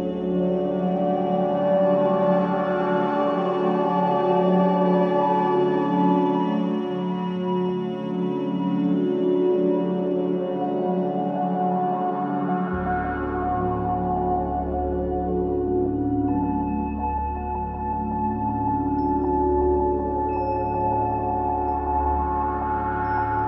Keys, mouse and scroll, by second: 0.8 space, 2.4 click, 4.3 click, 5.5 click, 7.1 click, 8.2 click, 9.2 click, 10.8-11.6 scroll down 4, 11.6-13.7 middle drag, 13.7 shift+a, 18.8 s, 22.1-23.4 drag.